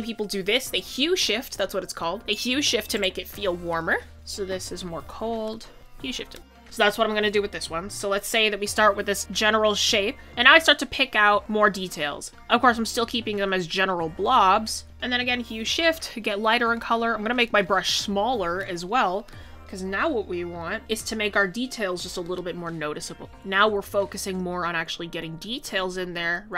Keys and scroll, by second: 7.0 scroll, 10.2 ctrl+z, 17.1 ctrl+z, 20.8 ctrl+z.